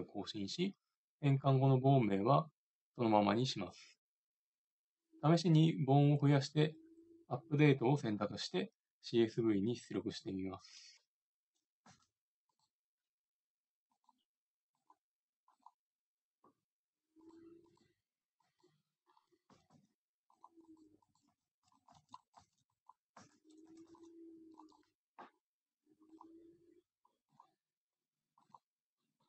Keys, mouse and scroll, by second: 10.8 middle click, 11.8 middle click, 11.9 Tab, 15.1 click, 16.9 middle click, 17.6-18.9 right drag, 18.9 click, 19.5 e, 20.7-21.8 right drag, 21.5 shift+d, 22.0 shift+d, 22.5 shift+d, 23.3 Tab, 23.7 a, 23.9 c, 24.6-25.6 drag, 27.0-29.2 drag.